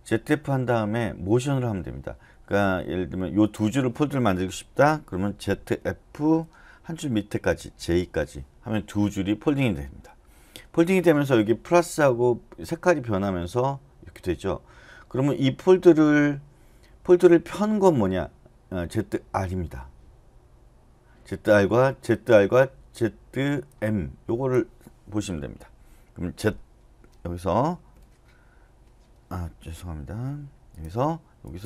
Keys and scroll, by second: 5.5-6.2 typing, 7.5-8.3 typing, 27.7 Escape.